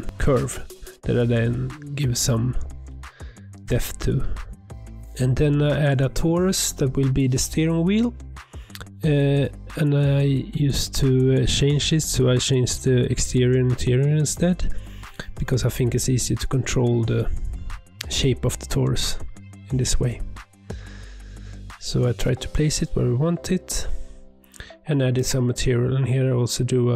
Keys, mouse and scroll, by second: 0.2 click, 0.4 ctrl+a, 0.7-1.3 scroll up 2, 1.3 click, 2.3 click, 2.6 click, 3.9 click, 4.7-5.3 drag, 5.3-6.1 scroll down 3, 6.1 click, 6.4-7.0 drag, 7.0 d, 7.6 click, 9.4 click, 9.7 shift+middle drag, 9.8 scroll up 1, 10.0 shift+middle drag, 10.2 shift+a, 11.2 click, 11.5 click, 12.1 click, 13.0-14.5 drag, 14.8 click, 15.7-17.1 drag, 18.0 click, 18.8 middle drag, 19.0 scroll up 1, 19.1 scroll down 2, 19.2 shift+middle drag, 19.4 click, 19.7 r, 20.5 click, 20.8 g, 21.4 scroll down 2, 21.5 middle drag, 21.7-22.1 scroll up 3, 21.8 shift+middle drag, 22.5 click, 23.3 e, 23.9 e, 24.3 click, 24.9 click, 25.1 middle click, 25.3 click, 25.4 Tab, 25.5 alt+click, 25.8 alt+click, 26.4 ctrl+b.